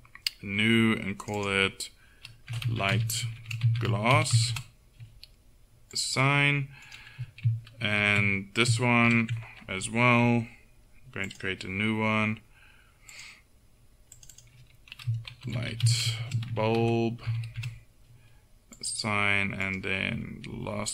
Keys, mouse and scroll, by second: 4.4 s, 6.9 right click, 8.0 ctrl+;, 9.1 ctrl+l, 11.3 click, 12.7-19.7 drag, 19.7-20.9 middle drag.